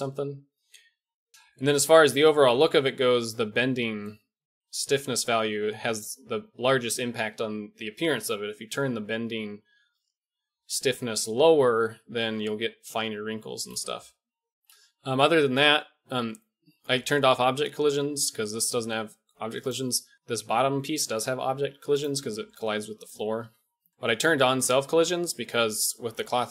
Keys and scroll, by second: 23.4 KP_1.